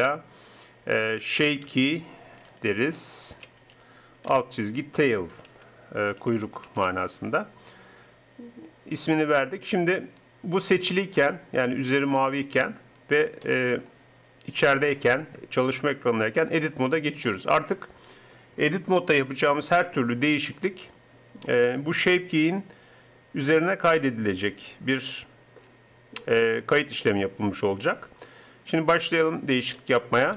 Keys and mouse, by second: 13.5 click, 16.5 Tab.